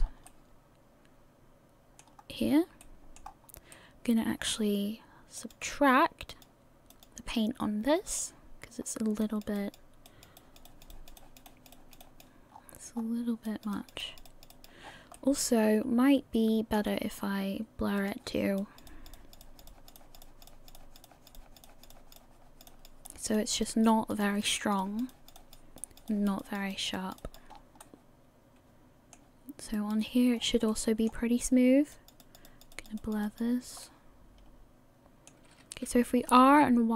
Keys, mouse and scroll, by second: 0.0-0.4 scroll down 3, 0.3 middle click, 2.1 scroll up 1, 2.8 middle click, 2.8 scroll up 2, 3.4 scroll up 2, 3.7 middle click, 5.4 click, 6.3 click, 8.8-9.1 scroll up 1, 9.2-11.8 click, 12.5 scroll down 5, 13.0-13.7 scroll up 3, 13.5 click, 13.7 click, 14.3 click, 14.5 click, 14.8 scroll down 1, 15.1 middle click, 16.7 scroll up 1, 17.6 scroll up 3, 18.0 click, 18.6 click, 19.4 click, 20.0 click, 20.2 click, 20.7 click, 21.0 click, 21.9 click, 22.2 click, 23.0 click, 23.3 click, 23.9 click, 24.2 click, 25.1 click, 25.4 click, 26.1 click, 26.4 click, 27.2 click, 27.5-28.0 scroll down 6, 27.8 middle click, 30.0 right click, 30.4 scroll up 4, 30.7 middle click, 31.9 click, 32.2 click, 32.7 click, 33.0 click, 33.8 middle click, 36.1 r.